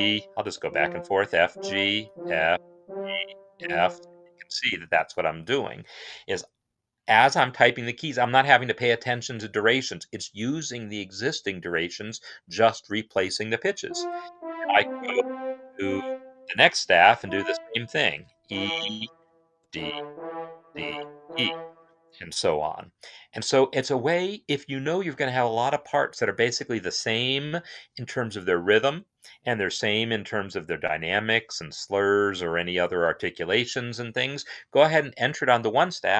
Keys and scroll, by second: 0.0-3.2 typing, 13.7 [, 14.5 Left, 14.7 Left, 16.9 e, 19.3-20.3 typing.